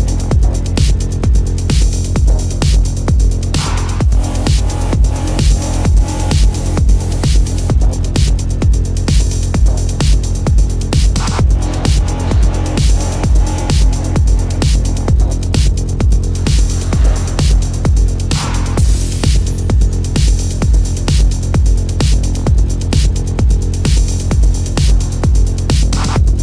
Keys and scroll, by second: 0.7 space, 1.1 ctrl+alt+z, 2.6 ctrl+alt+z, 3.0 ctrl+=, 3.6 ctrl+alt+z, 4.3 ctrl+=, 5.8 space, 6.2 space, 6.6 ctrl+=, 7.7 ctrl+alt+z, 8.3 ctrl+alt+z, 8.8 space, 13.4-17.2 typing, 18.0 ctrl+alt+z, 18.7 space, 20.4 space, 20.7 ], 21.0 ctrl+-, 21.6 ctrl+-, 21.8 ], 22.2 ctrl+-, 22.3 space, 24.3 ctrl+=, 24.7 space, 24.8 ctrl+=.